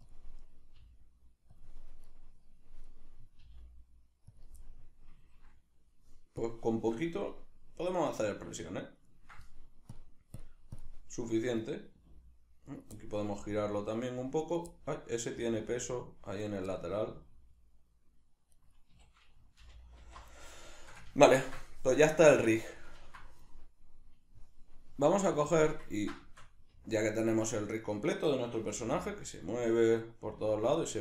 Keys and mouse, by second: 0.1 click, 0.5 right click, 0.7 g, 1.6 click, 2.1 right click, 2.9 right click, 3.4 g, 4.4 click, 4.6-6.4 middle drag, 6.4 drag, 6.8-10.0 shift+middle drag, 10.4 click, 10.8 drag, 11.1 middle click, 11.6 right click, 12.0 r, 12.8 right click, 13.0-14.6 middle drag, 13.3 r, 14.6 right click, 14.7-16.6 middle drag, 15.4 r, 16.6 right click, 16.8-18.7 middle drag, 17.1 r, 18.7 right click, 19.0 a, 20.4-25.4 middle drag, 25.4 click, 26.0-27.8 ctrl+middle drag, 27.8 right click, 28.7 g, 29.9 right click, 30.3 g.